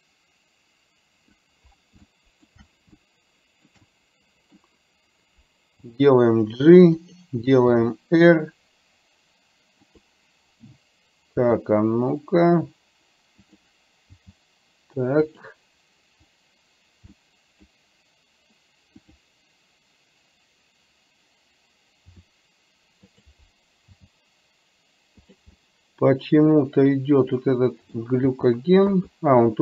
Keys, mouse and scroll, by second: 2.1 shift+middle click, 3.1 shift+middle click, 4.0 middle click, 6.0 g, 7.9 r, 11.5 r, 14.3 g, 17.3 middle click, 19.1 click, 22.3 r, 24.1 g, 25.6-28.0 middle drag, 28.4 g.